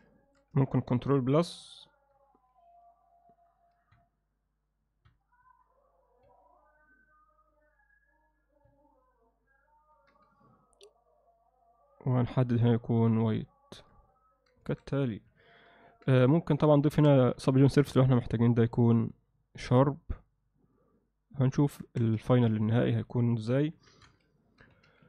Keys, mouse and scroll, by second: 0.2 shift+middle click, 5.5 ctrl+KP_Add, 7.6 ctrl+KP_Subtract, 10.0 ctrl+KP_Subtract, 12.1 click, 13.8 Tab, 14.1-14.5 alt+middle drag, 14.7 alt+a, 15.3 KP_1, 16.2-16.6 alt+middle drag, 16.9 Tab, 17.4 ctrl+alt+middle click, 18.2 ctrl+r, 21.9 Tab, 22.3 ctrl+middle click, 22.7-23.1 middle drag, 23.7 KP_1, 24.4 ctrl+alt+middle click, 24.7 z.